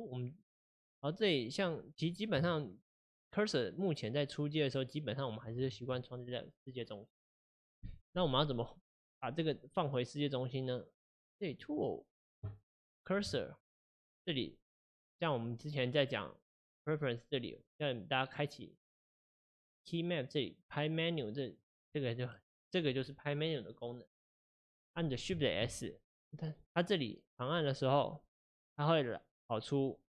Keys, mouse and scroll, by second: 1.3-2.0 right drag, 2.0 click, 2.5-5.5 shift+right drag, 11.5 click, 13.4-16.4 shift+right drag, 16.7-19.7 drag, 22.4 click, 25.6 shift+s.